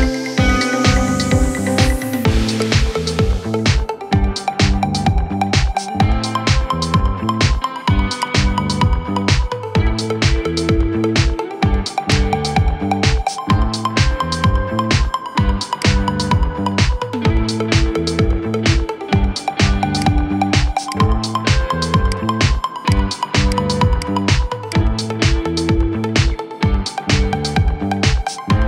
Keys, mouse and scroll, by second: 2.6-3.3 middle drag, 3.3 scroll up 3, 3.6-6.0 middle drag, 6.0 g, 8.2-10.7 middle drag, 10.7-11.1 scroll down 2, 11.1-11.8 shift+middle drag, 11.8 click, 12.3-13.3 middle drag, 13.3-13.7 scroll down 2, 13.7-14.8 middle drag, 14.8 scroll up 2, 15.6 click, 17.0 scroll down 3, 18.2-18.8 middle drag, 18.8 scroll up 2, 19.8 click, 20.6 click, 21.9 shift+click, 22.6 click, 23.3 click, 23.7 click, 24.4 shift+click, 25.4 KP_7, 25.7-26.3 scroll down 5, 26.3-27.2 shift+middle drag, 27.2 shift+d.